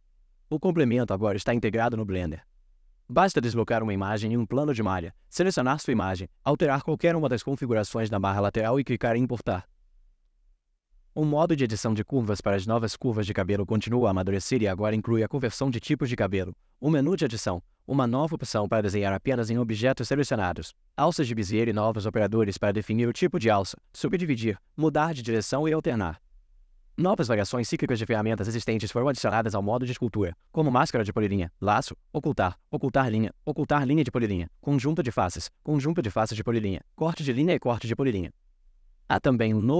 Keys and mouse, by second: 2.3 shift+a.